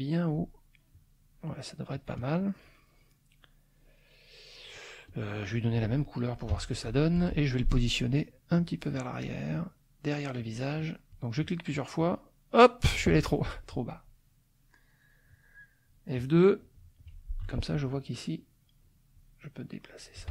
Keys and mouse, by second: 0.9 click, 1.9-3.3 drag, 4.0 click, 5.1 click, 5.5 click, 6.5 F7, 6.8 click, 7.1 F1, 8.6 click, 10.4 click, 10.8-12.3 drag, 13.2 click, 14.7 middle click, 17.4 F2, 17.9 click, 19.1-20.3 drag.